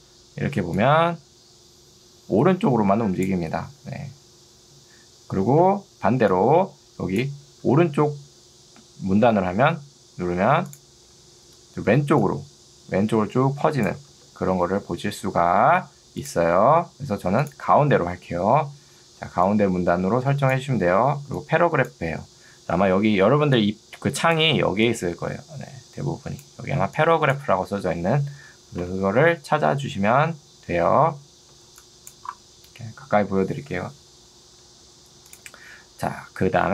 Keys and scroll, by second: 3.9 ctrl+z, 6.1 ctrl+2, 9.1 Escape, 14.1 ctrl+z, 19.1 ctrl+2, 28.9 Escape, 31.7 ctrl+2.